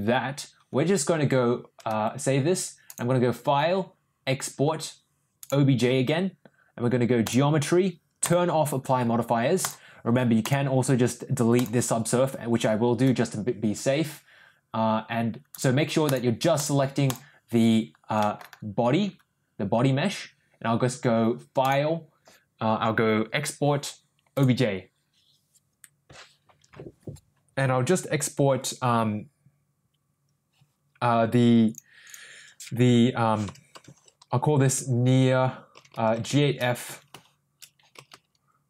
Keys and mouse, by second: 2.8-5.6 drag, 10.4 click, 11.6 click, 15.5 click, 16.0 click, 18.2 middle drag, 21.7-24.4 drag.